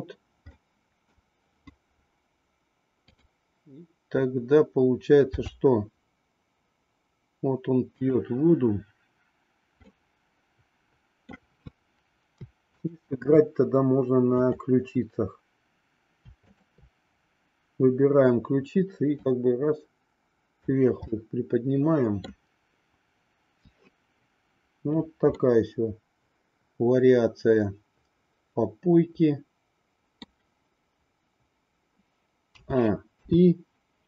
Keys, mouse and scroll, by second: 0.4 middle click, 5.3 r, 9.8-11.3 middle drag, 12.8-13.8 shift+drag, 14.4-15.7 drag, 19.1-20.8 drag, 21.1 scroll up 1, 21.2-22.3 middle drag, 25.7-30.3 middle drag, 32.5 a, 33.2 i.